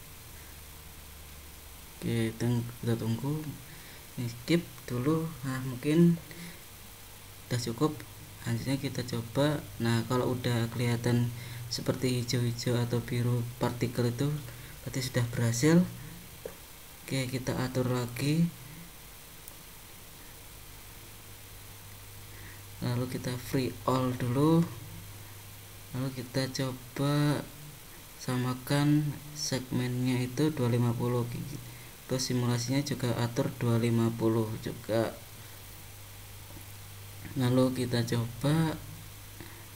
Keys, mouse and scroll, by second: 8.8 super+click, 21.7 super+click, 24.1 super+click, 29.3 super+click, 32.9 super+click, 34.8 super+click, 35.8 super+click, 39.4 super+click.